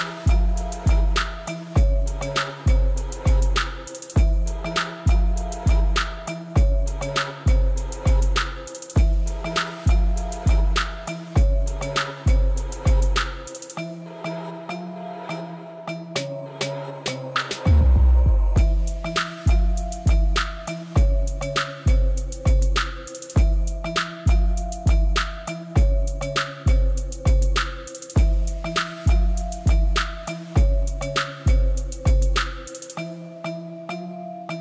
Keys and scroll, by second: 1.7 u, 2.7 u, 3.9 u, 4.7 u, 5.4 Tab, 7.5 Tab, 8.9 u, 9.8 u, 10.7 u, 15.1 u, 15.9 u, 17.8 u, 18.9 u, 20.1 u, 21.7 u, 23.2 u, 24.6 ., 26.7 u, 30.9 u, 32.1 u, 33.9 u.